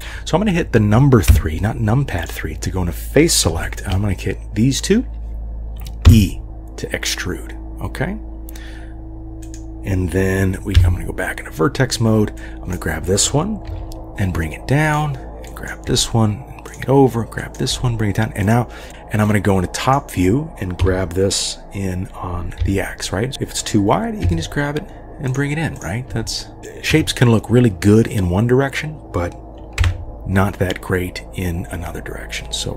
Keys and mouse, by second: 1.3 3, 2.2 click, 3.6 shift+click, 6.1 e, 10.8 1, 12.4 click, 13.7 g, 15.7 click, 15.9 g, 17.7 g, 18.9 KP_7, 19.3 click, 20.8 g, 23.3 KP_7, 24.2 g, 26.1 g, 26.6 3, 26.9 KP_3, 29.8 e.